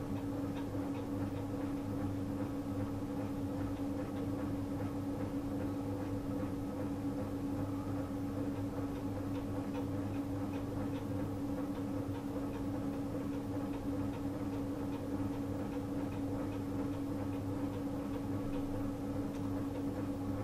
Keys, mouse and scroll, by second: 0.8 click, 5.4 click, 8.4 click, 14.5 click, 17.4 click.